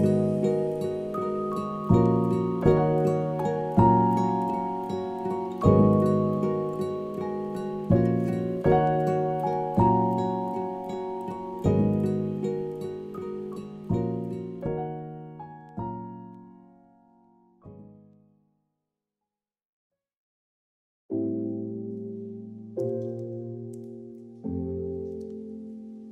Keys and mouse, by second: 1.4-3.1 drag, 3.5 a, 3.7 a, 4.3-4.7 middle drag, 4.9 shift+middle click, 5.2 middle click, 6.4 middle click, 6.9 Tab, 8.4 shift+middle click, 8.9 middle click, 10.4 click, 10.7 middle click, 11.4 g, 12.6 shift+Tab, 14.4 g, 15.5 Tab, 16.2 click, 16.8 Tab, 17.0 a, 17.2 q, 18.2 Tab, 18.6 ctrl+a, 19.4-19.8 middle drag, 19.9 a, 20.1 a, 21.1-21.5 middle drag, 21.7 click, 22.2 shift+middle click, 22.5-23.1 middle drag.